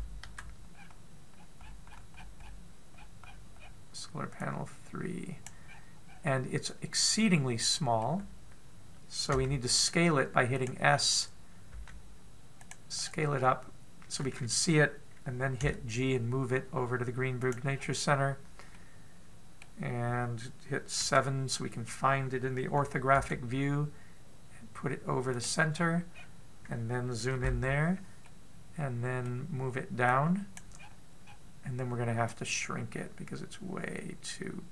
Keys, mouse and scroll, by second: 0.2 scroll up 5, 0.3 KP_Decimal, 0.8 KP_Decimal, 1.3-1.9 scroll up 1, 1.9 scroll down 1, 2.2-4.6 scroll down 39, 5.1 click, 6.2-7.4 scroll up 9, 7.8 middle click, 10.0 s, 11.5-12.4 scroll down 2, 12.4 s, 13.6-15.5 scroll down 5, 15.5 scroll down 5, 16.3 g, 18.3-18.9 scroll up 5, 19.3 middle click, 21.6 KP_7, 23.8 g, 26.3-26.7 scroll up 4, 26.7 scroll down 3, 26.8 scroll down 2, 27.9 KP_Decimal, 28.8 middle click, 30.7 click, 31.3-32.0 scroll down 13, 32.9 click.